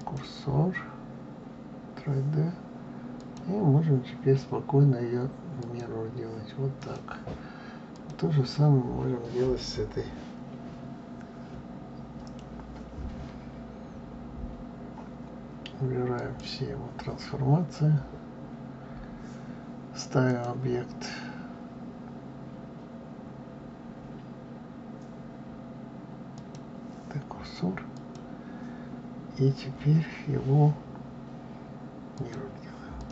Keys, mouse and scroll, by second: 3.1-6.1 drag, 6.8 click, 7.9 click, 16.1-19.1 drag, 20.2-23.2 drag, 27.8-30.9 drag, 32.9 click.